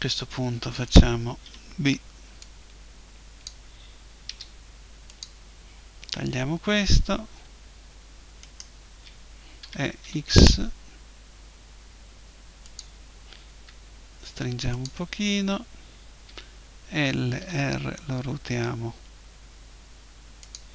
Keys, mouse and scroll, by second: 0.7 a, 1.4 b, 4.3 Delete, 8.4-10.4 right drag, 9.6 e, 12.8-14.7 drag, 13.5 s, 14.8-16.6 drag, 16.3 l, 17.4 r, 20.6-20.7 drag.